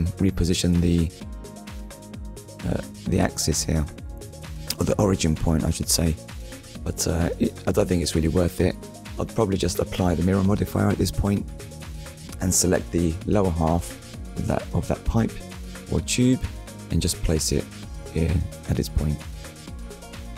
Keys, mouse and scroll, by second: 1.7 shift+middle click, 4.5 click, 5.4 click, 10.1 scroll down 1, 10.7 shift+middle click, 12.5 scroll up 1, 14.1 Tab, 15.1 click, 17.9 click, 18.7 click, 20.1 scroll down 1.